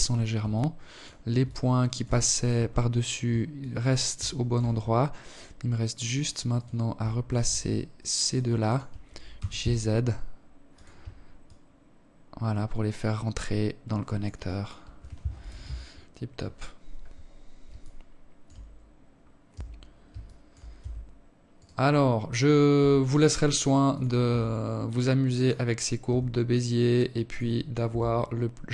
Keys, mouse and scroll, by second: 0.6 alt+click, 2.0 alt+click, 2.7 alt+shift+click, 3.2-3.9 scroll up 6, 4.9 right click, 5.7 shift+right click, 6.7 alt+click, 7.8 g, 9.9 alt+click, 12.9 alt+click, 13.8 KP_7, 14.3 scroll down 5, 15.5 scroll down 4, 16.2 alt+shift+click, 17.1 scroll down 2, 17.5-17.9 scroll up 3, 17.9 Tab, 18.7 alt+shift+click, 19.2 Tab, 20.0 right click, 21.2 s, 22.7 r, 24.5 g, 26.3 Tab, 27.2 Tab, 27.5 Tab.